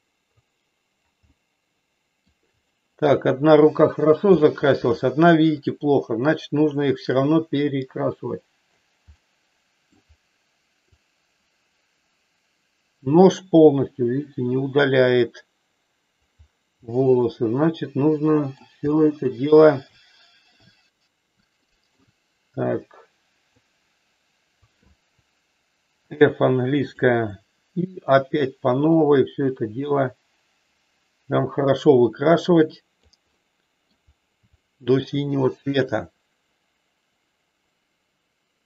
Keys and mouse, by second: 1.3-2.3 middle drag, 2.7 shift+middle click, 4.3 shift+middle click, 5.7-8.9 drag, 9.2 middle click, 10.9-16.3 drag, 16.9-18.5 middle drag, 18.8 shift+middle click, 19.9 shift+middle click, 21.7 shift+middle click, 22.5-23.5 drag, 25.9 f, 27.3-33.2 drag, 33.3 middle click, 34.5 shift+middle click, 35.9-38.6 drag.